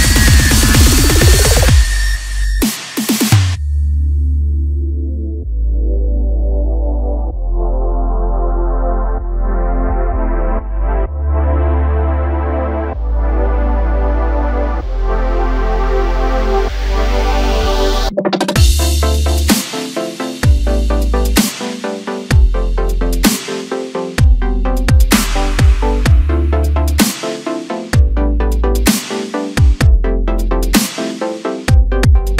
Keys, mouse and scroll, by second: 0.1-2.6 middle drag, 2.6 shift+click, 4.3-5.6 middle drag, 5.6 scroll down 2, 5.8-7.0 middle drag, 7.0-7.6 scroll up 1, 7.6 x, 8.7-11.8 middle drag, 12.1 KP_7, 12.9-13.7 scroll up 2, 13.7 a, 14.5 middle click, 15.3-16.3 scroll down 1, 16.3 m, 19.3-20.4 middle drag, 20.4 KP_7, 21.0-21.6 scroll up 1, 21.6 3, 22.9 click, 23.9 click, 24.9 click, 25.8 click, 26.2 click, 27.0 click, 27.5 click, 28.3 click, 28.7 middle click, 29.6 scroll up 1, 29.8 middle click, 30.6 1, 31.5 click.